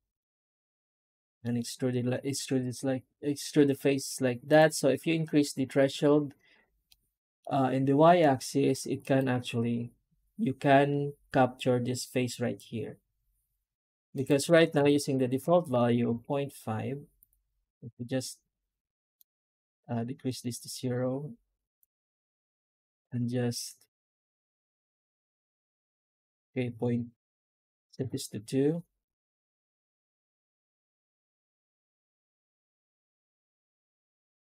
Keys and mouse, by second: 6.7 middle click, 8.9-11.7 right drag, 15.6 Tab.